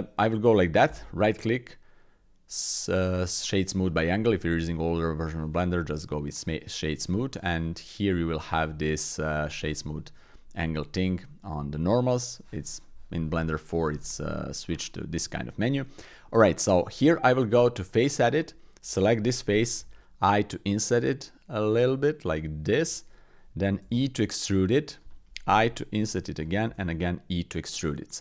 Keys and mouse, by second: 0.8 w, 8.0 click, 15.6 click, 16.2 click, 17.1 Tab, 17.8 click, 23.8 e, 25.6 i, 26.6 e.